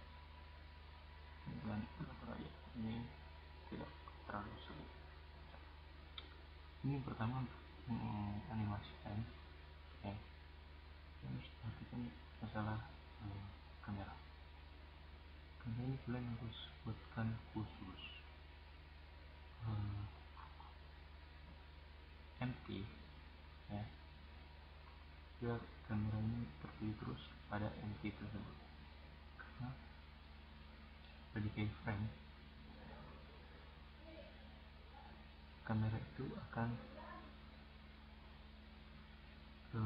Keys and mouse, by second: 0.4-2.0 drag, 4.3-5.9 drag, 5.9 right click, 6.0 click, 6.5-7.6 middle drag, 8.1-9.7 middle drag, 9.9 click, 10.3-11.3 middle drag, 11.3-11.8 drag, 11.9-13.7 right drag, 19.5-21.3 drag, 22.4-24.1 drag, 24.1-24.7 middle drag, 25.2-25.9 middle drag, 25.9-26.9 right drag, 31.1-32.2 middle drag, 32.4-35.3 drag, 34.6-35.3 right drag, 35.7-36.4 right drag, 36.8-39.3 right drag.